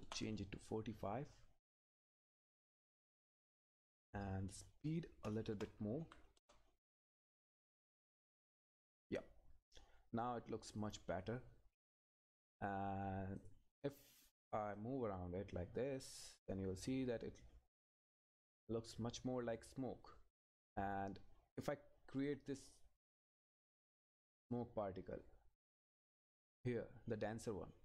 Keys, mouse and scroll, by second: 0.0 Return, 2.4-4.0 scroll up 1, 4.5 click, 6.4 Return, 7.7 click, 9.7-10.7 scroll down 1, 10.7 click, 12.6-13.4 scroll up 1, 13.4 click, 13.9 scroll down 1, 14.8 click, 24.5 click, 25.9-27.4 scroll down 1, 27.4 click.